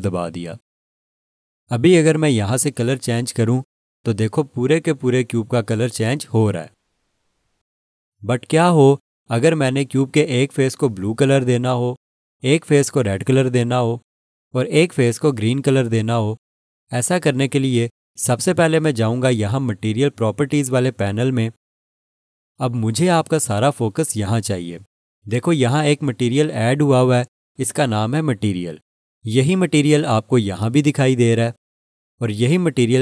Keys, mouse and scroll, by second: 4.0 click, 18.9 click, 22.0 click, 23.6-27.4 scroll up 1.